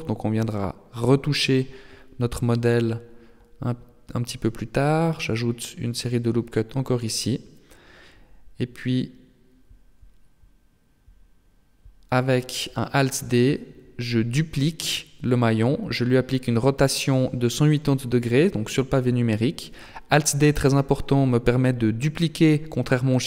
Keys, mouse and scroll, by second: 4.1 ctrl+r, 6.3 Tab, 8.1 Tab, 9.1 ctrl+z, 9.6 ctrl+z, 10.3 Tab, 12.6 alt+d, 15.2 r, 17.7 g.